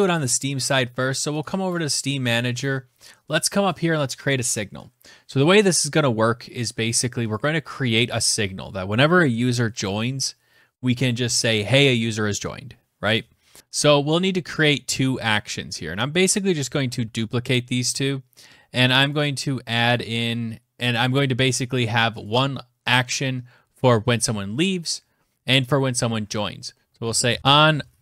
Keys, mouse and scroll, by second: 1.6 click, 1.7 click, 1.7-3.0 scroll, 3.0-5.2 scroll, 5.2 click, 5.2-5.9 scroll, 6.8 click, 13.6 click, 13.6-14.1 scroll, 14.1 click, 14.8 click, 16.1 ctrl+c, 16.3 ctrl+v, 16.4 ctrl+v, 18.5 click, 18.7 click, 21.7 click, 21.8 click, 26.4 click, 26.4-28.0 typing, 27.4 click.